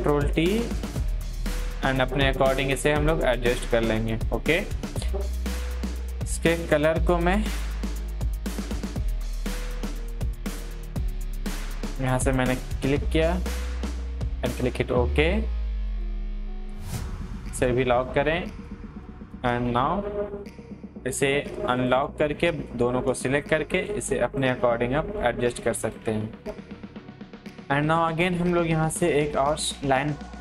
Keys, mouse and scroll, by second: 10.8 click, 10.8 click, 13.7 click, 13.7 click, 19.7 ctrl+t, 21.1 click, 23.4 ctrl+t, 23.8-26.5 drag, 26.5 click.